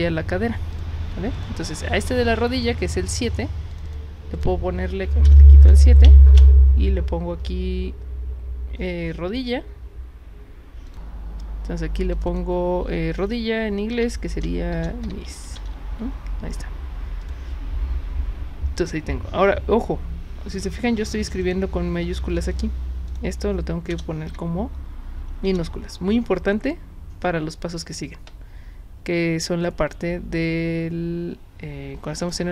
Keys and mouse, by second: 0.7 click, 1.3 click, 2.5 click, 3.7 click, 3.9 click, 4.3 click, 5.3 BackSpace, 6.3 shift+-, 10.8 click, 12.1 click, 14.5-16.2 typing, 17.2 click, 18.8 click, 21.4 click, 22.4 click, 22.5 click, 23.1 click, 23.9 BackSpace, 24.3 k, 32.2 click.